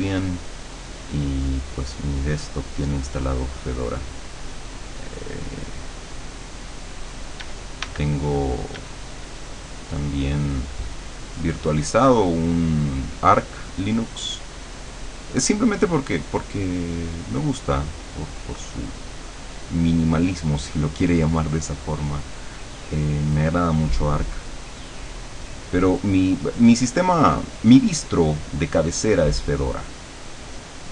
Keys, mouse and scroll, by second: 3.6-7.5 drag, 7.5 d, 8.1 click, 8.8 d, 9.1-13.3 drag, 14.1-22.4 drag, 23.3-30.9 drag.